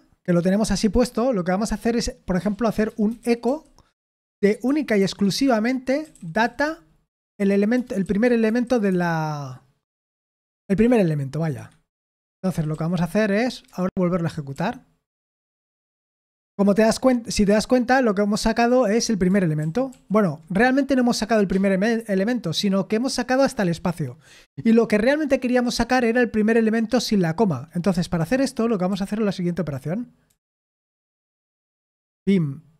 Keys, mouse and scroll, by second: 2.4-8.5 typing, 8.9 Escape, 11.6 Escape, 11.9-13.2 typing, 13.6 Return, 14.5 ctrl+p, 15.1 ctrl+p, 15.5 Return, 19.6 ctrl+p, 19.9 ctrl+p, 28.2 ctrl+p, 28.9 ctrl+p, 30.3 ctrl+p, 31.1 ctrl+m, 32.1 v.